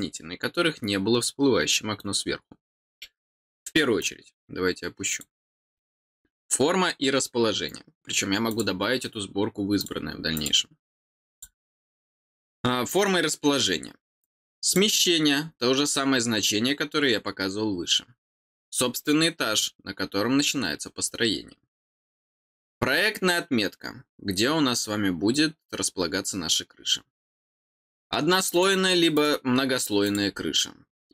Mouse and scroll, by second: 3.9-5.1 drag, 8.4 click, 9.7 click, 10.3 click, 11.3 click, 14.2 click, 27.6 click, 28.5 click, 29.1 click, 30.0 click.